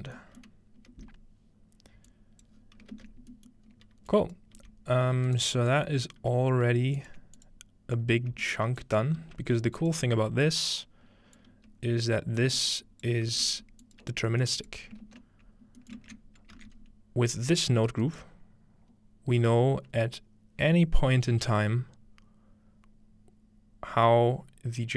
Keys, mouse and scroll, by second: 0.9 space, 2.1-3.5 drag, 2.6-3.7 scroll down 1, 3.7 scroll up 1, 4.1 click, 4.6 g, 6.2 g, 7.0 ctrl+click, 7.4 click, 8.0 click, 8.8-12.8 drag, 9.2 typing, 13.1 click, 13.3 g, 14.0 ctrl+click, 14.7-16.2 ctrl+drag, 16.6 ctrl+alt+a, 16.6-18.7 middle drag, 16.8-18.1 scroll up 2, 17.3-18.7 drag, 18.1 right click.